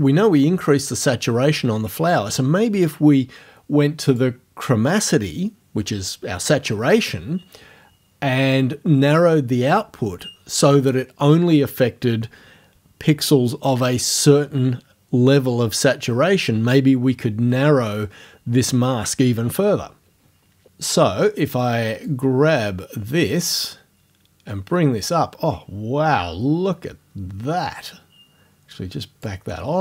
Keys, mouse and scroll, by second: 4.1 click, 22.1-29.4 drag.